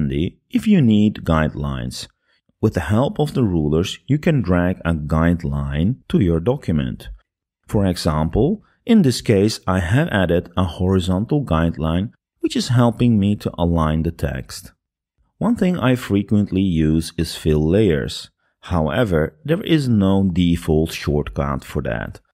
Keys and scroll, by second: 11.4-13.4 typing.